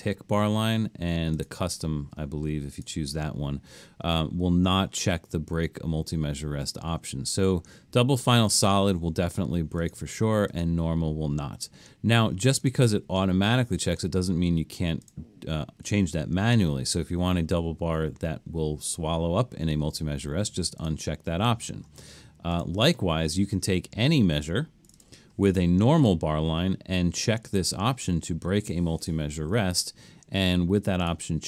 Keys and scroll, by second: 30.5 Escape.